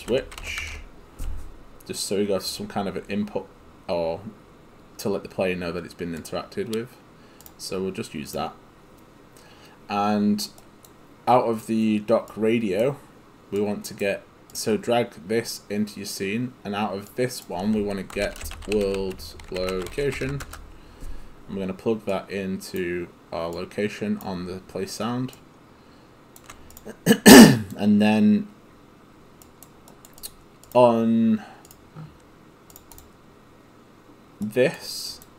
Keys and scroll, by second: 0.0-1.1 typing, 4.9 h, 18.0-20.8 typing.